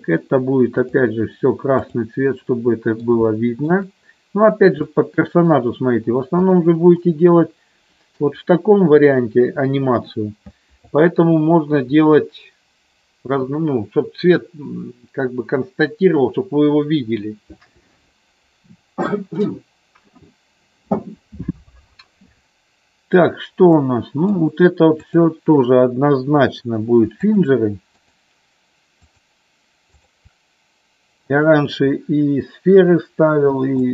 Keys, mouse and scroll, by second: 1.7 click, 2.6 middle click, 3.2 shift+middle click, 4.9 middle click, 6.5 click, 7.1-8.4 middle drag, 23.8 middle click, 27.4-29.0 shift+drag, 30.7-32.2 shift+drag, 33.8-33.9 shift+drag.